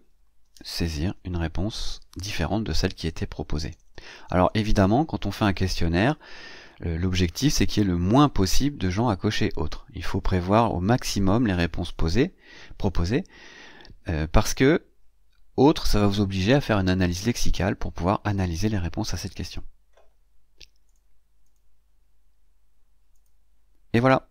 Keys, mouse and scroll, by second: 0.0-0.6 typing, 3.4 BackSpace, 19.0-19.3 scroll up 1, 19.3-20.5 scroll down 1, 20.5 scroll down 1, 20.7 click, 21.3 click, 23.0 click.